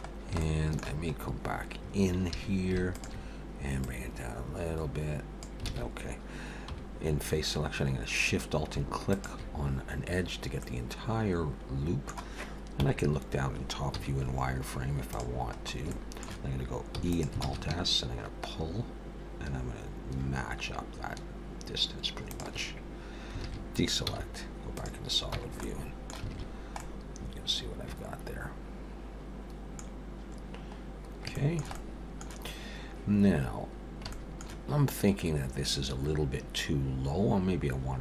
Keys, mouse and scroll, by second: 0.1 scroll down 1, 0.4 shift+middle click, 2.3 2, 2.9 alt+shift+click, 3.8 click, 5.7 alt+a, 6.7 3, 9.0 alt+shift+click, 10.6 middle click, 12.8 KP_7, 14.0 z, 15.6-15.9 scroll up 3, 15.9 shift+middle click, 17.0 e, 17.4 alt+s, 23.4 alt+a, 24.1 z, 25.4 Tab, 25.6 middle click, 26.3 alt+a, 26.5-28.4 scroll down 3, 26.8 middle click, 30.3-31.3 scroll down 3, 31.3 shift+middle click, 33.0-33.4 scroll up 1, 33.7 scroll down 1, 34.1 shift+middle click.